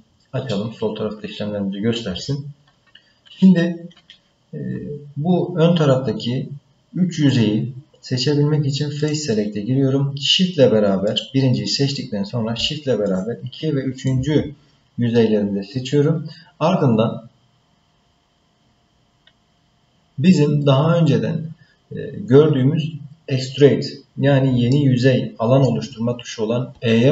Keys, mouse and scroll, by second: 6.2-9.0 scroll up 3, 9.0 click, 11.1 click, 13.0 shift+click, 14.0 shift+click, 24.7 middle click.